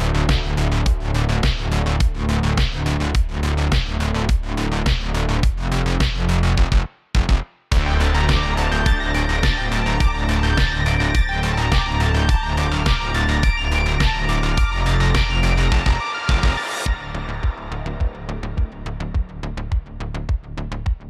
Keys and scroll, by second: 0.5 super+z, 1.7 super+z, 2.8 super+z, 4.3 super+z, 6.0 super+z, 9.7 super+z, 10.9 shift+f, 11.2 d, 15.0 typing, 16.9 shift+d, 18.3 super+z, 18.6 shift+f, 19.0 shift+d.